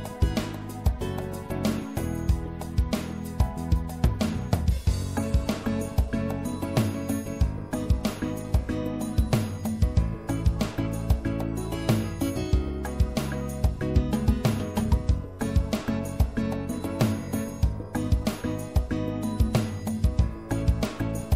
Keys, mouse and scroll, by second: 0.5 right click, 1.0-10.4 middle drag, 9.5 s, 12.7 s, 15.4 e, 16.3 s.